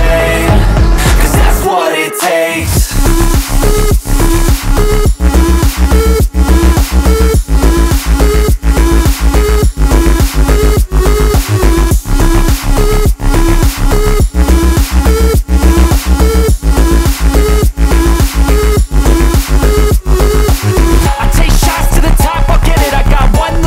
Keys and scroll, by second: 14.1-15.1 typing, 15.8 F4, 19.9 Caps_Lock, 20.1-22.4 typing.